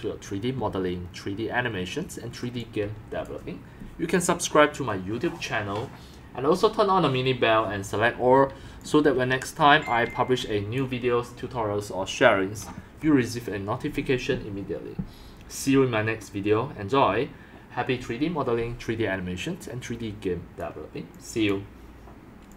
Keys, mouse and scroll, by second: 1.0 scroll up 1, 1.7 scroll down 1, 2.3 scroll down 1, 2.5 x, 2.6 click, 2.8 c, 8.8 x, 9.1 c, 10.0 x, 10.4 c, 19.6 click, 21.1 click.